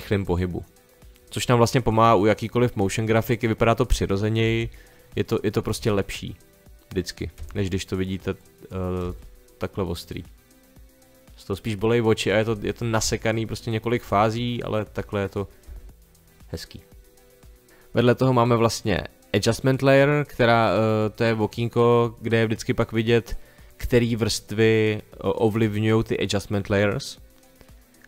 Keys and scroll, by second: 4.4 space, 5.7 space, 7.3 space, 9.0 space, 13.0 space, 15.7 space.